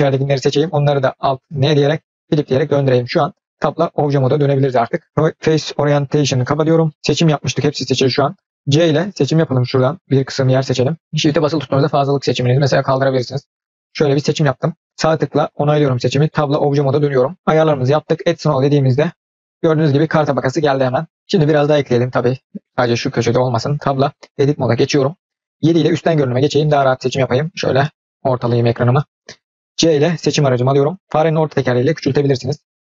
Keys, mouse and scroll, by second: 0.0 l, 1.6 alt+n, 2.7-3.4 scroll down 2, 3.4-3.9 scroll up 1, 3.9 Tab, 4.0 click, 4.3 scroll down 1, 4.6-5.1 middle drag, 5.1-6.3 drag, 6.5 click, 6.8 middle click, 6.9 Tab, 7.5 click, 8.7 c, 9.5-10.8 drag, 16.3 Tab, 18.1 click, 21.7 click, 25.5 KP_7, 27.0-28.6 shift+middle drag, 29.8 c.